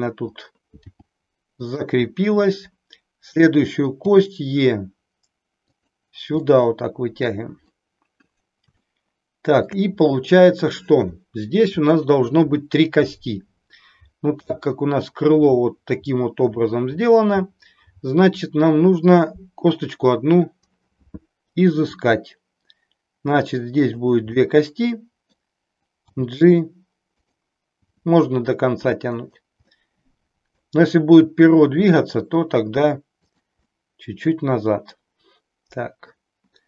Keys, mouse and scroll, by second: 0.9 g, 4.0 e, 5.7 click, 6.6-7.7 middle drag, 8.9 shift+middle click, 21.8 g, 24.4-25.4 middle drag, 26.1 g, 27.8 g, 29.8-30.8 middle drag, 31.7 g, 33.2 click, 33.7-36.1 middle drag.